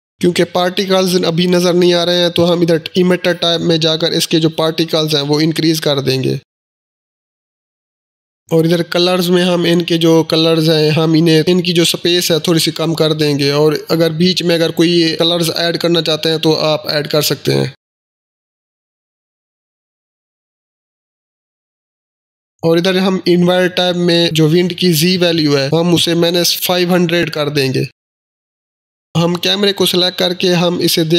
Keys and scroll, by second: 4.3-6.1 typing, 27.6-28.4 typing.